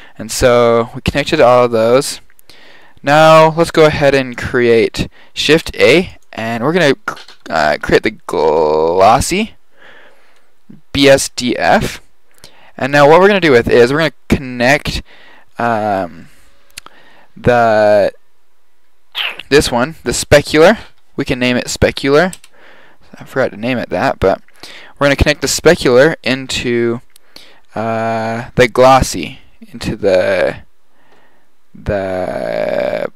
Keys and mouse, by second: 0.5 drag, 4.2 click, 5.4 shift+a, 19.2-22.0 drag, 22.0 middle click, 26.0-27.9 drag.